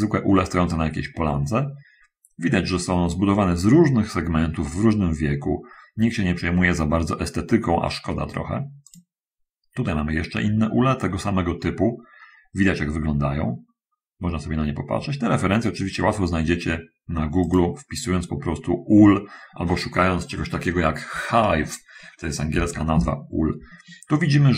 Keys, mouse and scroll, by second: 8.9 click, 17.7 click.